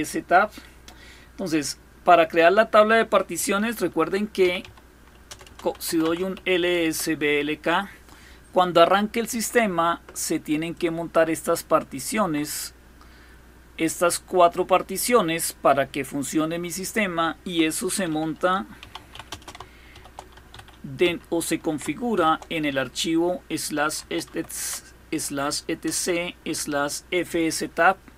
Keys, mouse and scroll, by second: 3.8-6.4 typing, 6.4 Return, 10.3-15.2 drag, 16.3 click, 18.2-20.6 typing, 21.8 typing, 23.2-24.4 typing, 25.5 Return.